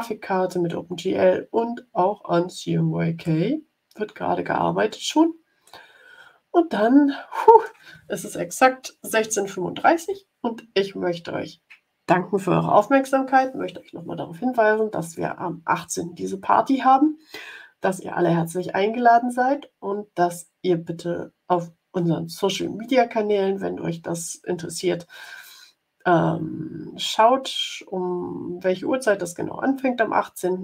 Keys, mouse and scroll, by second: 3.2-5.2 drag, 5.6-7.8 drag.